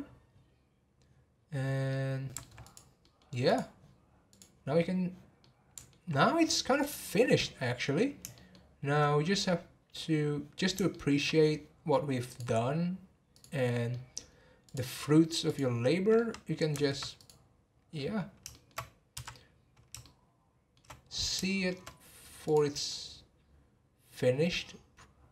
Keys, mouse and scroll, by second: 1.6 scroll down 12, 1.9-2.6 middle drag, 2.6 click, 3.0-3.5 middle drag, 3.5 click, 4.3 click, 5.4-6.8 middle drag, 6.8 click, 7.2 scroll up 3, 8.3-12.3 shift+middle drag, 12.3-13.9 drag, 13.9-14.6 middle drag, 14.6 click, 15.8 click, 16.1-17.1 middle drag, 17.1 click, 17.6 scroll down 1, 18.5-19.1 shift+middle drag, 19.1 n, 20.0-21.0 shift+middle drag, 21.0-21.4 scroll up 1, 21.4-22.5 shift+middle drag, 22.5 click, 24.8-25.3 scroll up 1.